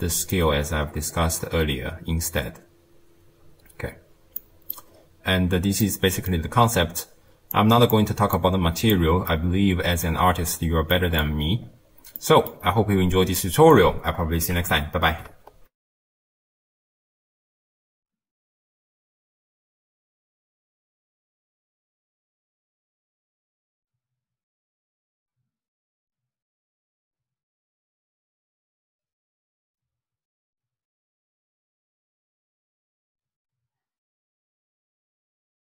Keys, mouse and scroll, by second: 0.6-4.2 scroll up 10, 4.4 middle click, 5.0-5.8 scroll down 7, 5.8 middle click, 6.5-7.6 scroll down 3, 7.6 click, 8.4 click, 9.3-10.4 middle drag, 10.4-11.0 scroll down 1, 11.0 middle click, 11.6-12.2 scroll down 3, 12.2 middle click, 12.7-13.4 scroll down 3, 13.4-15.8 middle drag, 15.8 ctrl+alt+shift+w.